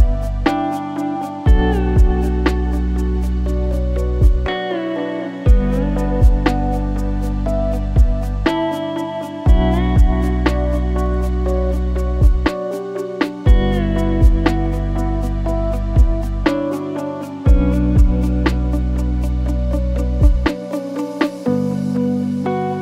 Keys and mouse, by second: 0.4 click, 3.8 alt+z, 4.4 e, 6.2 e, 7.4 e, 8.7 click, 9.7 e, 12.2 click, 12.7 g, 14.4 Tab, 15.3-16.6 drag, 17.7 click, 18.3 click, 18.5-19.5 drag, 20.5 click, 21.2-21.9 drag, 22.3 Tab.